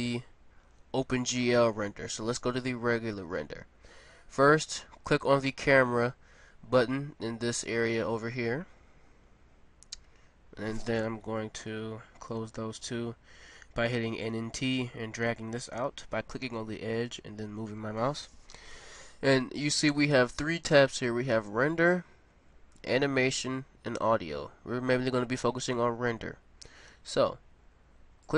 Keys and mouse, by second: 5.0-7.3 drag, 11.5 n, 11.8 t, 14.1-15.8 drag, 28.2 click.